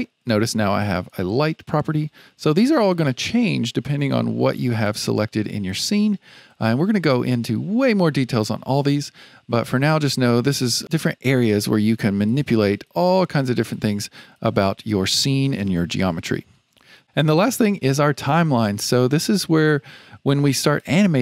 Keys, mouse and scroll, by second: 0.9 click, 4.8 click, 5.6 click, 10.9 click, 11.3 click, 11.7 click, 12.2 click, 12.7 click, 13.1 click, 13.7 click, 14.3 click, 20.7-21.2 drag.